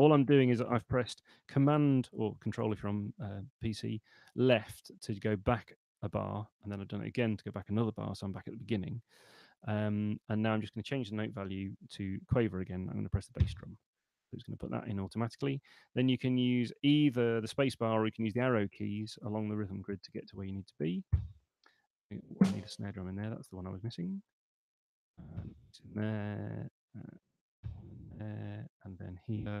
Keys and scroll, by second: 11.8 5, 18.0 Right, 22.0 Left, 24.2 Right.